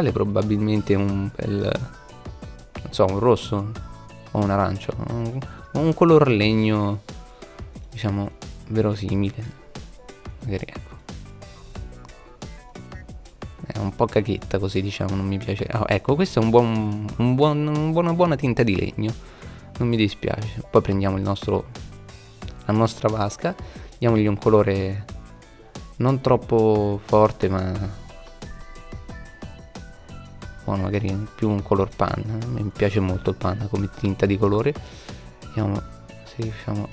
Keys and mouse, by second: 0.6-1.9 middle drag, 18.2-19.9 right drag, 22.4-24.1 drag, 33.3-34.4 middle drag.